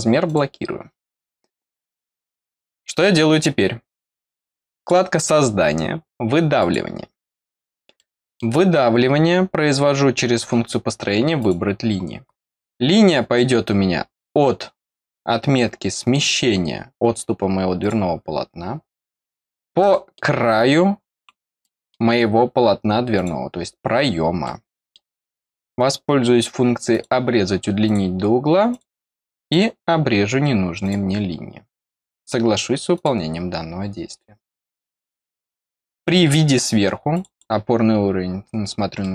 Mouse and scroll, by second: 0.2 click, 2.9 scroll down 1, 4.7 click, 6.5 click, 7.9 middle click, 11.3 click, 11.9-12.3 scroll up 2, 13.5-14.9 scroll down 1, 13.7-15.5 middle drag, 14.9-15.5 scroll down 1, 15.9-17.7 scroll up 1, 17.7 click, 19.0 click, 19.4-19.8 scroll down 1, 19.8 middle click, 21.1 click, 21.6 middle click, 22.1 scroll down 2, 23.1 click, 24.4 middle click, 26.9 click, 27.8 click, 28.6 click, 29.4 click, 30.8 click, 32.9 click, 37.1 click, 37.3 click, 38.1-38.4 scroll down 1, 38.9 middle click.